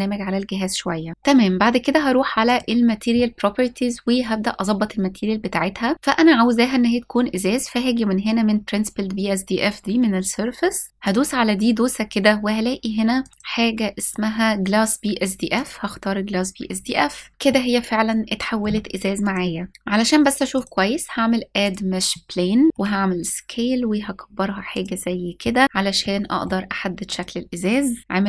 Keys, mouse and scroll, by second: 1.1-2.1 scroll down 1, 2.1 click, 10.9-11.8 drag, 12.8 click, 13.3-17.3 drag, 17.3 scroll down 1, 17.3-18.2 shift+middle drag, 18.8 click, 20.2-21.4 drag, 22.6 s, 24.4 click, 25.4 click, 25.6-26.1 shift+middle drag, 26.7 click, 28.0 g, 28.0 z.